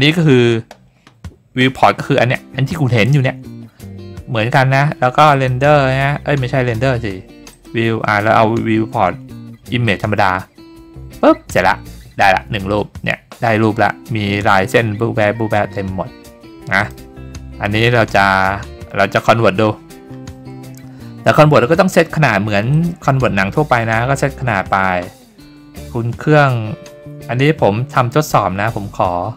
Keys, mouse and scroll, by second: 5.3 click, 7.5 click, 9.8 click, 16.8 click, 22.7 click.